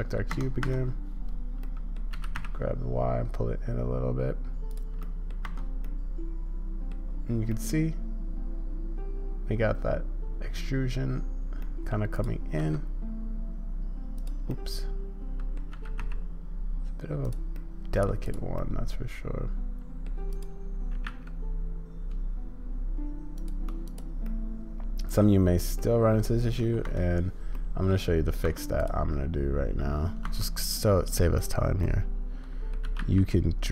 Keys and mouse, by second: 1.6 click, 2.1 g, 5.0 middle click, 5.4 Tab, 5.8-6.9 drag, 7.6-8.5 drag, 8.5-11.0 middle drag, 11.6 middle drag, 12.1 click, 14.5-15.6 drag, 17.5-18.1 drag, 18.2 click, 18.6-20.1 drag, 20.3-22.2 drag, 24.2-25.2 drag, 25.8 click, 26.9 Tab, 27.6 click, 28.8 click, 31.9 click, 32.8 g.